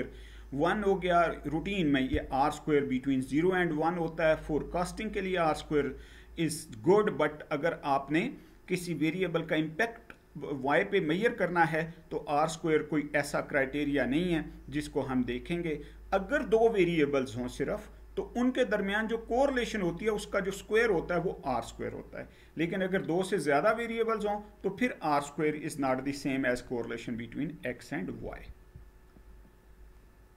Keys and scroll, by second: 28.1 Down.